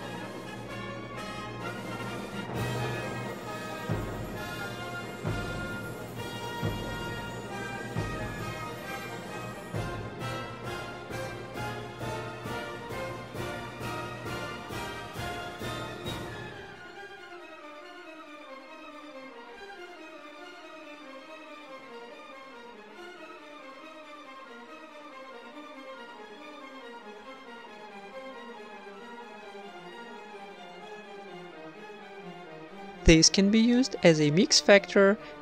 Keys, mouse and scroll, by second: 1.0 click, 1.6 click, 3.2 middle click, 4.1 click, 5.1 click, 5.7-7.0 middle drag, 7.2-7.6 right drag, 7.4 g, 10.2-10.7 middle drag, 10.8-11.8 right drag, 11.0 drag, 11.0 g, 11.4 shift+a, 12.5 middle click, 13.1-14.9 drag, 15.0 click, 15.8-17.5 drag, 17.3 shift+d, 18.9 x, 19.3-20.8 drag, 20.9 click, 21.6 click, 21.9 click, 23.0 shift+d, 23.7 click, 24.7 click, 26.1 click, 26.6 click, 27.3 click, 27.8 click, 28.9 click, 29.3 click, 30.0-31.2 middle drag, 30.6 ctrl+s, 31.7-33.6 middle drag, 32.3-33.3 drag, 33.5 click, 34.1 click, 34.1 right click, 34.2 shift+d, 34.5-35.4 middle drag.